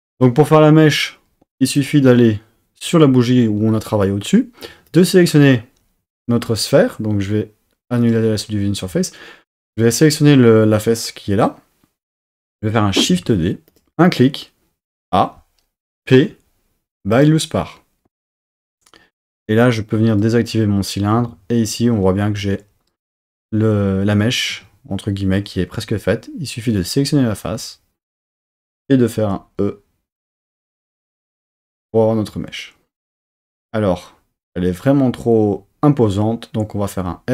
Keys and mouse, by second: 1.8 click, 3.6 Tab, 4.7 3, 4.9-6.6 drag, 8.1 click, 13.0 shift+d, 13.7 click, 14.9 a, 15.9 p, 20.1 click, 21.1 Tab, 21.6 click, 22.4 3, 24.5 Tab, 25.8 3, 26.8 click, 28.2 click, 29.2 e, 31.6-33.1 drag, 33.1 Tab, 36.9 s.